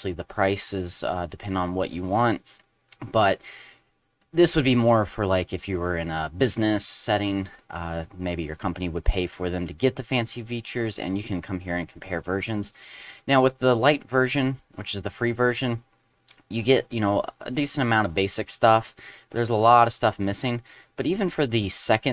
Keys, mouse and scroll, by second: 9.5 middle click, 10.1 middle click, 11.8 click, 15.3-16.3 drag, 16.5 click, 18.7 scroll down 1, 19.3-19.7 scroll down 1, 20.4 middle click, 20.8 middle click, 21.2 middle click, 22.0 middle click.